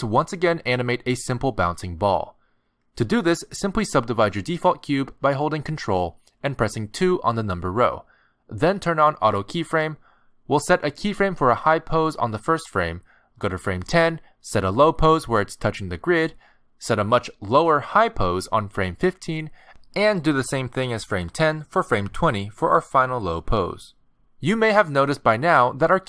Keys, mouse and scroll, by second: 3.8 ctrl+2, 4.8 right click, 8.8 click, 10.2 g, 13.2 click, 13.8 click, 15.2 alt+g, 17.7-18.5 alt+scroll down 5, 19.0 g, 20.4-21.4 alt+scroll down 4, 21.5 g, 21.8 g.